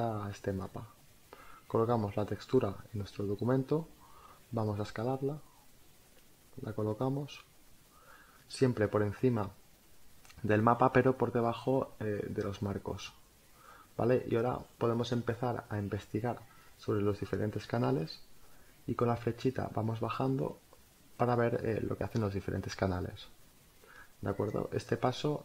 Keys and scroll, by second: 0.6 space, 7.2 Return, 16.0 Down, 22.7 Up.